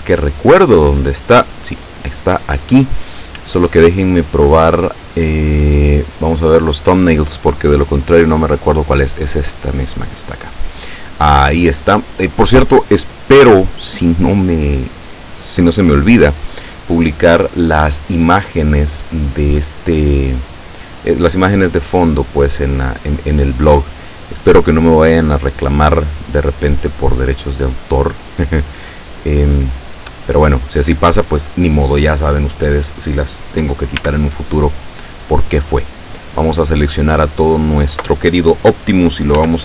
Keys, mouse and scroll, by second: 1.7 click, 6.1 click, 6.7 click, 9.3 click, 34.0 b, 34.6-36.1 drag, 39.4 r.